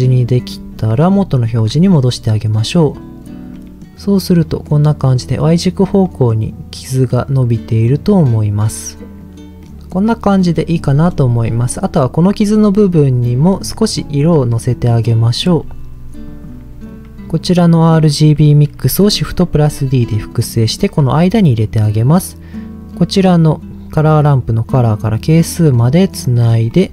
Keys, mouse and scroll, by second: 0.2 middle click, 1.2 ctrl+shift+click, 2.2 middle click, 2.6-2.9 scroll up 1, 3.2 scroll up 1, 3.5 middle click, 4.4 middle click, 5.6-6.0 scroll down 2, 6.0 middle click, 7.1 middle click, 9.2 click, 9.6 middle click, 10.6 middle click, 14.6-15.0 scroll down 2, 14.8 middle click, 16.2 click, 19.2 shift+d, 20.0 click, 21.2 middle click, 23.2-26.2 drag, 26.4 scroll up 2, 26.6 middle click.